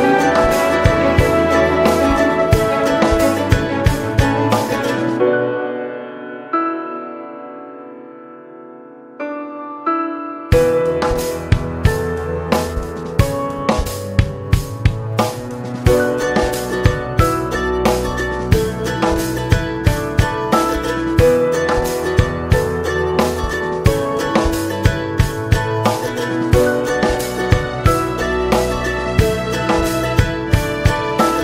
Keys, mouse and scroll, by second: 1.6 space, 2.4 space, 3.9 click, 4.7-6.4 drag, 6.4-7.7 middle drag, 7.7-8.0 scroll up 1, 8.0-9.4 middle drag, 9.4-12.9 drag, 12.9 KP_0, 14.6-14.9 scroll up 2, 14.9 shift+middle click, 15.3-15.7 scroll down 1, 15.7-17.0 middle drag, 17.0-20.8 drag, 20.8-22.2 middle drag, 22.2 space, 22.9 space, 23.9 click, 24.6-27.0 middle drag, 27.0-27.4 scroll down 3, 27.4-30.0 middle drag, 30.0-31.4 right drag.